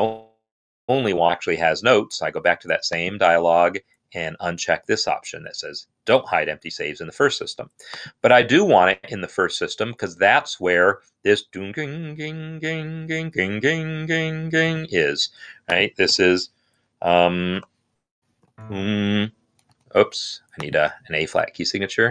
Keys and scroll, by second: 16.0 n, 17.8-18.6 typing, 19.4 Escape.